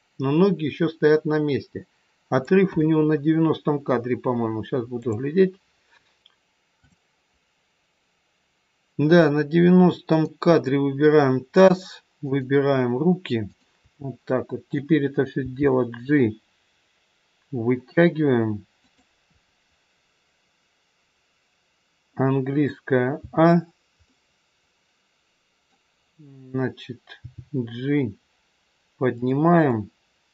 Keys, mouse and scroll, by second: 5.0 click, 10.0 click, 12.2 shift+click, 15.5 g, 23.1 a, 23.7 scroll down 2, 24.0 middle click, 27.2 g, 29.6 click.